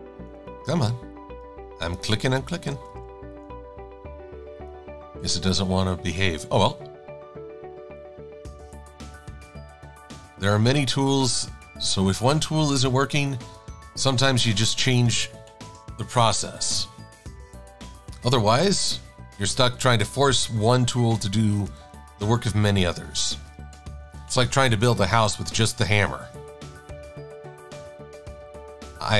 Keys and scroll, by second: 3.0 c, 6.7 a, 23.7 super+=, 24.0 super+=.